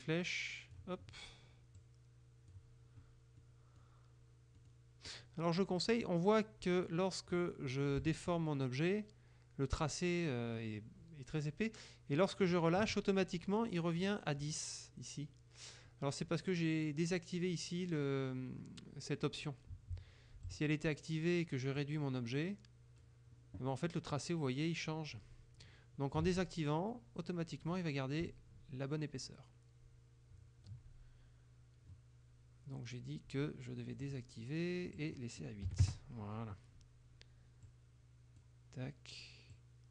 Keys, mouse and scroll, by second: 1.8 click, 3.4 middle click, 4.6 middle click, 5.1 middle click, 5.8 click, 8.1-12.7 shift+drag, 20.5 click, 21.8-23.2 drag, 26.3 ctrl+z, 28.3-30.9 shift+drag, 34.1 click, 35.1 click, 35.8 KP_8, 35.9 KP_Enter, 37.8-38.7 drag, 39.6 click.